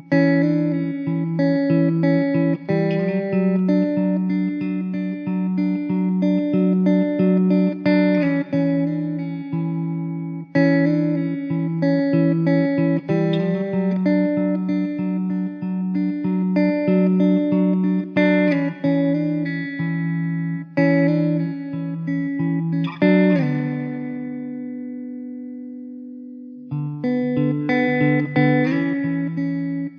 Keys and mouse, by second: 14.7 middle click, 19.2 alt+middle click, 19.9 alt+q, 20.6 alt+middle click, 23.7 m, 28.5 middle click.